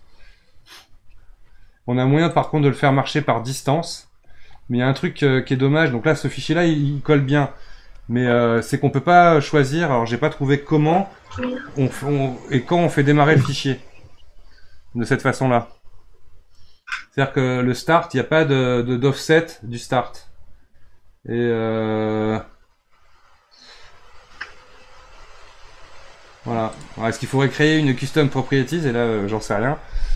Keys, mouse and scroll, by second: 2.3-5.3 drag, 26.7-30.1 drag.